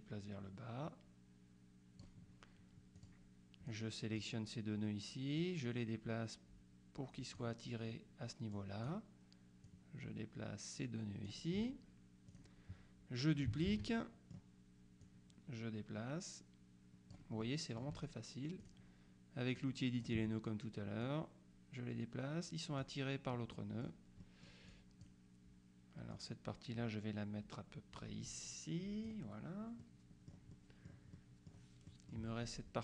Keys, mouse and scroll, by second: 3.0 click, 3.8 click, 5.5-8.0 drag, 8.6 click, 9.8-11.8 drag, 12.4 click, 13.8 ctrl+d, 14.0 ctrl+middle click, 15.1-17.7 drag, 18.7 click, 19.6 click, 21.1-23.4 drag, 23.6 middle click, 24.8 click, 26.2-29.6 drag, 29.9-30.9 middle drag, 31.2 middle click, 32.0 middle click.